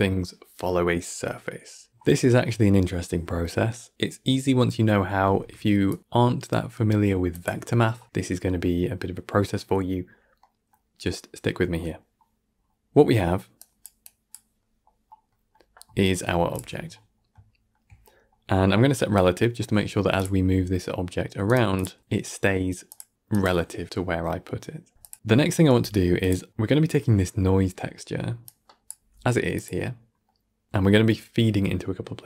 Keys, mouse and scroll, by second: 1.6-3.9 scroll up 7, 4.7 click, 5.1 g, 10.3 middle click, 10.8 scroll down 1, 11.1-12.4 middle drag, 12.4-12.7 scroll up 5, 12.7-13.5 middle drag, 13.5 click, 14.0 click, 14.5 middle click, 14.9 scroll up 1, 15.2-15.8 middle drag, 15.8 scroll up 1, 16.0-16.4 middle drag, 16.4 alt+shift+click, 17.0-18.1 shift+middle drag, 18.1 scroll up 2, 18.4-20.0 middle drag, 20.0 click, 20.3 g, 24.3 click, 24.6 g, 25.1 middle click, 25.6 g, 26.5-28.3 middle drag, 28.3 click, 28.9 g, 29.8 scroll down 2, 30.1-32.0 middle drag.